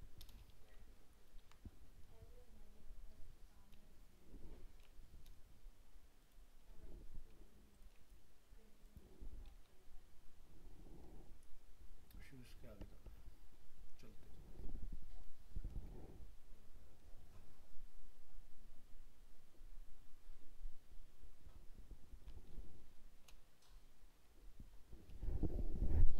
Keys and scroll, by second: 1.4 ctrl+v.